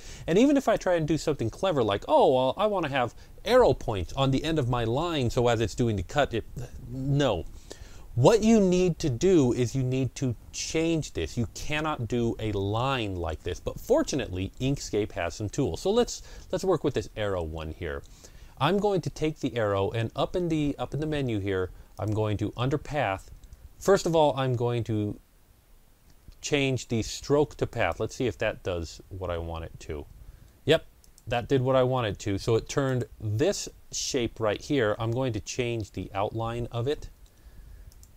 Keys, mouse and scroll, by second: 0.5-2.3 drag, 2.3 scroll down 1, 21.8 click, 21.8 scroll down 1, 27.6 click, 27.6-29.8 scroll down 1, 30.9 click, 37.2 click, 37.7 click.